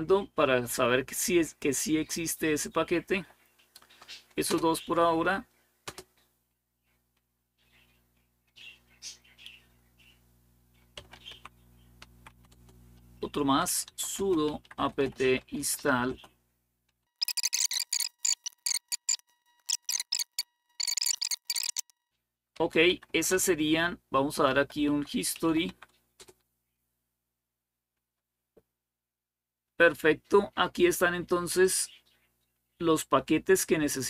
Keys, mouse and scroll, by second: 4.3 Return, 5.7 Return, 10.5-25.2 typing, 12.3 Return, 25.4 Tab, 26.0 Return, 31.4-34.0 drag.